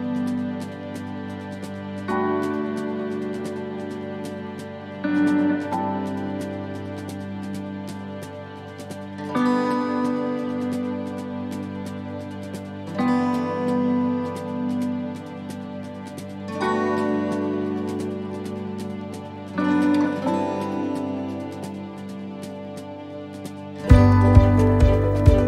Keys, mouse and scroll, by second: 0.1 click, 5.2 shift+middle click, 5.8-6.2 scroll down 4, 6.2 shift+middle click, 6.9 shift+middle click, 7.3 scroll up 4, 7.9 shift+right click, 8.4 shift+right click, 8.8 shift+right click, 9.9 scroll down 3, 10.5 shift+d, 12.3 click, 14.5 shift+middle click, 14.9-15.4 scroll up 4, 15.4 shift+middle click, 16.4 click, 17.8 right click, 18.8 l, 19.1-19.9 l, 20.1-25.2 l.